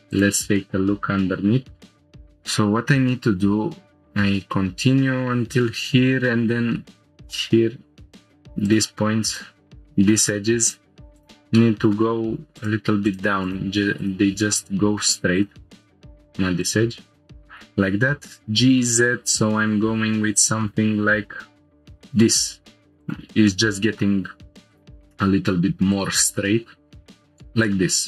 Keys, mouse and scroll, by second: 0.1 click, 0.9 scroll up 1, 1.8-2.2 scroll down 3, 2.1 scroll up 1, 6.8-7.3 middle drag, 8.0 scroll up 2, 8.6 click, 9.3 shift+click, 10.2 click, 10.6 shift+click, 11.6 middle click, 12.6 shift+click, 13.6 shift+click, 14.4 shift+click, 14.5 middle click, 15.3 shift+click, 16.6 click, 18.2 g, 18.4 z, 23.0 shift+click, 23.5 middle click, 24.7 shift+click, 25.9 click, 27.1 shift+click, 27.1 g, 27.1 z, 27.2 scroll down 2, 27.6 middle click.